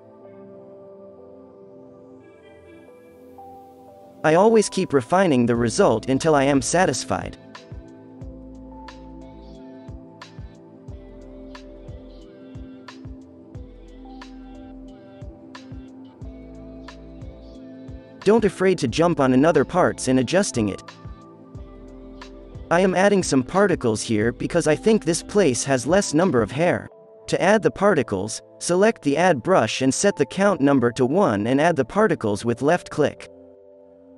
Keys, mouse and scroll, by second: 2.5 f, 3.0-5.1 drag, 5.1 z, 7.0 middle click, 7.1 middle click, 7.8-8.2 drag, 8.4 middle click, 8.7 alt+a, 13.2 alt+a, 14.6-15.6 drag, 15.0 z, 19.7 f, 20.2 f, 21.4 middle click, 31.7 f.